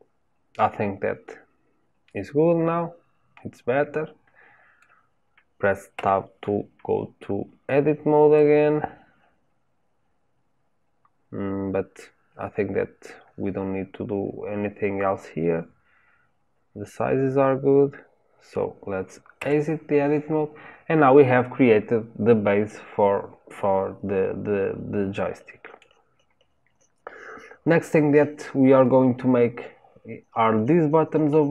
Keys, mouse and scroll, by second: 5.9 Tab, 8.3-11.3 middle drag, 19.3 Tab, 20.7-21.3 scroll down 1, 21.3-31.5 middle drag.